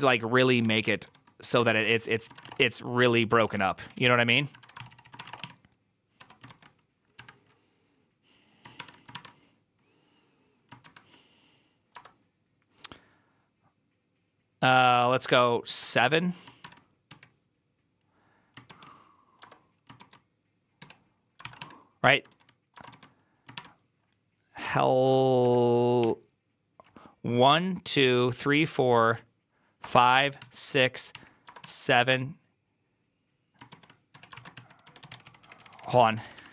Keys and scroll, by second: 0.0-0.9 typing, 0.5 Tab, 1.4 Tab, 1.7 ctrl+c, 2.0-7.5 typing, 6.0 Tab, 8.6-9.0 typing, 10.5-11.2 typing, 21.3 ctrl+c, 21.3-23.4 typing, 21.9 Tab, 25.3-25.9 typing, 34.2-36.5 typing.